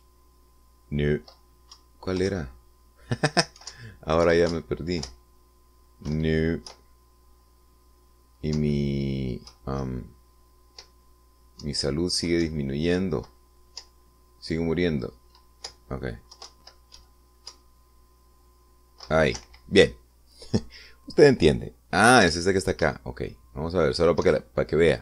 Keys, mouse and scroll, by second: 0.0 Right, 0.6 Right, 0.8 Up, 3.0 Left, 3.5 Right, 5.0 Up, 5.6 Left, 5.8 Right, 6.4 Up, 7.4 Left, 8.0 Right, 9.8 Up, 10.8 Right, 12.9 Down, 13.7 Right, 14.3 Left, 17.6 Left, 17.8 Right, 20.7 Escape, 23.5 p.